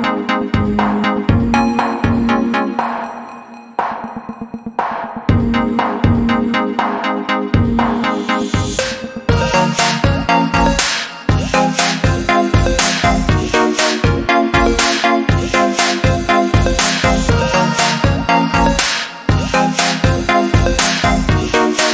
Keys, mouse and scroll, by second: 0.5 ctrl+click, 2.0 click, 3.0 click, 9.1 click, 9.6 scroll down 1, 10.4 scroll up 1, 12.1 click, 15.5 scroll up 1, 16.6 click, 17.4 click.